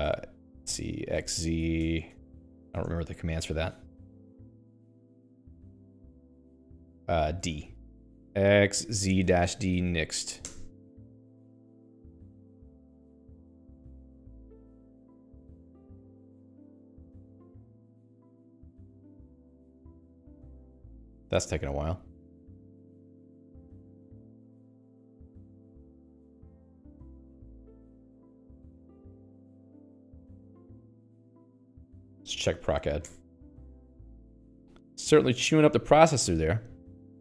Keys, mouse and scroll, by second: 0.4 z, 1.6-3.5 typing, 4.0 Escape, 4.9 scroll up 2, 5.7-6.9 scroll up 12, 6.9-7.8 scroll down 10, 7.6-10.5 typing, 10.9 Return, 18.7 click, 25.3 Escape, 25.9 click, 28.1 click, 32.6 alt+x, 32.8-33.6 typing.